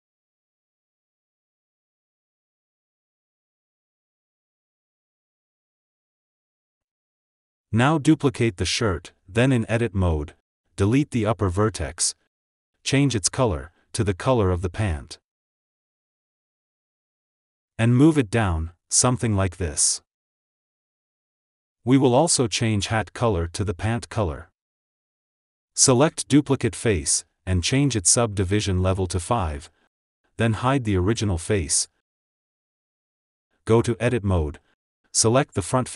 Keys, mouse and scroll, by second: 6.2 click, 6.5-6.8 scroll down 3, 6.8 click, 8.2 shift+d, 9.7 Tab, 10.7 click, 11.7 x, 14.1 Tab, 16.1 click, 17.9 g, 21.3 ctrl+s, 21.8 ctrl+s, 22.3 click, 23.6-25.1 drag, 25.1 ctrl+s, 26.5 click, 27.3-30.3 drag, 31.1 click, 32.6 click, 33.7 scroll up 4, 34.0 ctrl+z, 34.1 Tab.